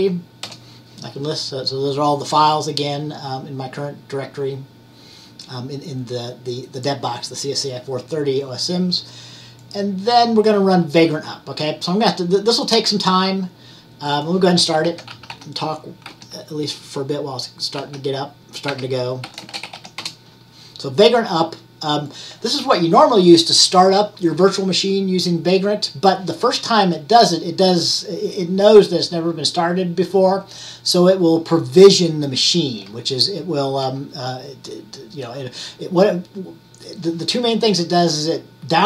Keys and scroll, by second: 0.0-0.8 typing, 14.7-16.2 typing, 17.9-20.4 typing.